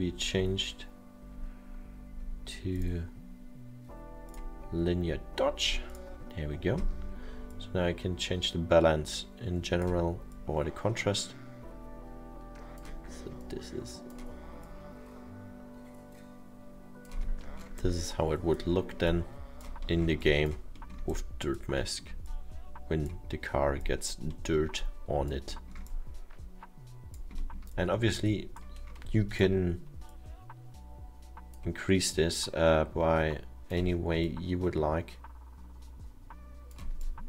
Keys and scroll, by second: 17.6 alt+7.